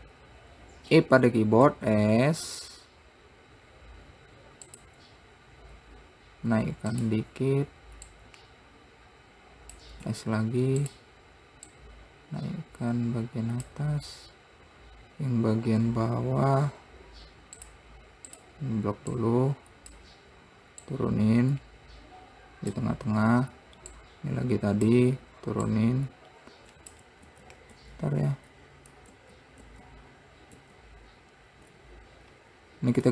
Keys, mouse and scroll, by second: 1.3 e, 7.3-8.7 drag, 10.5 s, 12.1 click, 16.2-16.6 scroll up 1, 18.0 click, 18.7 click, 19.5 click, 21.2 click, 24.3 click, 26.1 click, 27.7 ctrl+z, 28.1 ctrl+z, 29.5 ctrl+z, 30.0 ctrl+z, 30.9 ctrl+z, 32.7-33.1 scroll down 1.